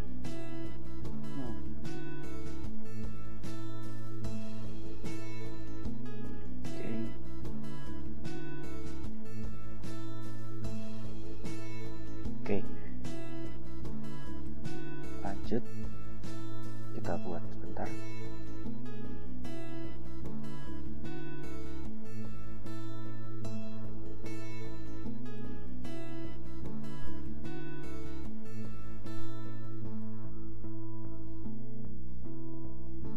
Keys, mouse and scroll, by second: 0.3 scroll down 2, 1.4-2.6 drag, 4.3 click, 5.6 click, 6.6 Return, 7.8 ctrl+v, 9.3 ctrl+], 10.6 BackSpace, 10.7 Return, 11.4 ctrl+v, 13.3 scroll down 2, 14.5 click, 15.6 Return, 19.0 click, 21.9 ctrl+v, 24.1 scroll down 2, 25.4 click, 26.4 Return, 30.0 click, 31.3 ctrl+v, 32.4 scroll down 2.